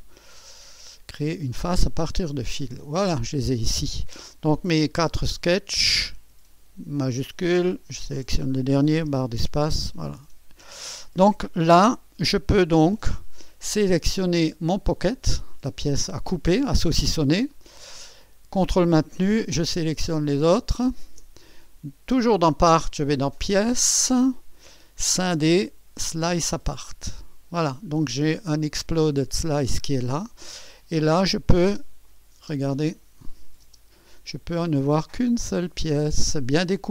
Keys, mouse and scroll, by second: 1.8 click, 2.7-3.8 drag, 4.8 click, 7.9-9.0 shift+drag, 9.1 space, 10.4-11.0 scroll down 1, 11.0-12.2 drag, 11.0-11.4 scroll down 1, 11.9 space, 13.5-14.2 scroll down 1, 14.2-15.0 scroll up 1, 15.0-16.2 drag, 17.4-18.3 scroll down 1, 19.3-21.8 ctrl+drag, 23.4-24.4 drag, 26.3-27.4 drag, 27.5 click, 27.6-28.8 scroll down 1, 29.2-30.2 drag, 29.6-31.0 scroll down 1, 31.0-33.0 drag, 31.7 space, 32.5 space, 33.3-34.3 drag, 33.7 space, 34.6-35.6 drag, 35.6-36.6 scroll up 1, 36.4-36.9 typing, 36.6-36.9 drag.